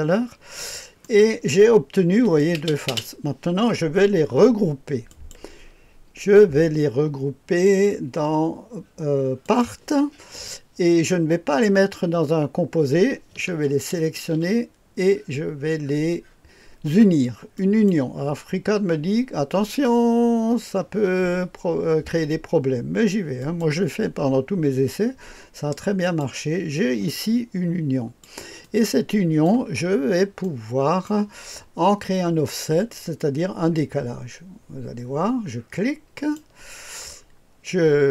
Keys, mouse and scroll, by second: 1.0 right click, 2.2 click, 2.6 typing, 5.0 click, 9.4 click, 13.9 ctrl+click, 17.5 click, 23.4 click, 26.0 click, 26.7 click, 27.5 click, 28.6 click, 29.8-31.0 scroll up 2, 36.1 click, 36.7 click, 37.1-38.1 scroll up 1.